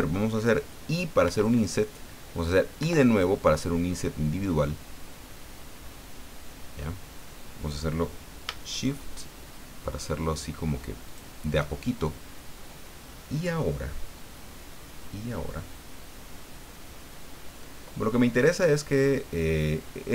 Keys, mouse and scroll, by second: 1.2 i, 2.8 i, 11.1 shift+click, 13.6-15.7 middle drag, 18.5-20.1 middle drag.